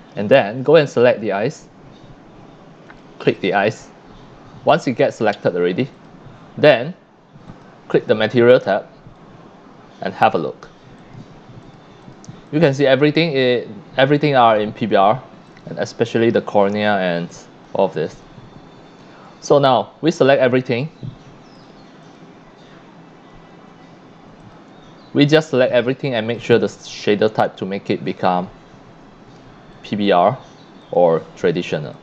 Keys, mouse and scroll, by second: 1.1 click, 2.4-2.7 middle drag, 2.9 click, 5.9 click, 6.8 click, 7.5 click, 9.1-10.2 drag, 11.0 click, 11.6 click, 12.0 click, 12.5 click, 15.5 click, 17.3 click, 17.8 middle click, 18.1 click, 19.4 drag, 19.8 scroll up 1, 20.1 scroll down 1, 20.4 scroll up 1, 21.6 click, 22.0 click, 24.4 shift+click, 25.2 scroll down 1, 26.3 click, 29.7 click, 30.8 click, 31.9 click.